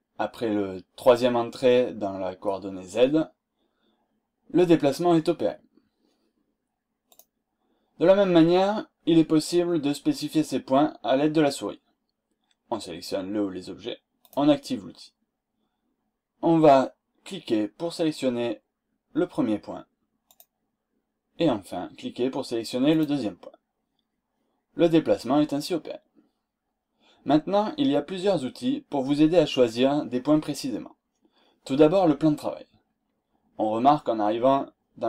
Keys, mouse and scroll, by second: 7.0 click, 14.2 click, 20.3 click, 22.8 click, 32.8-33.3 scroll down 2, 33.7-34.1 scroll down 2.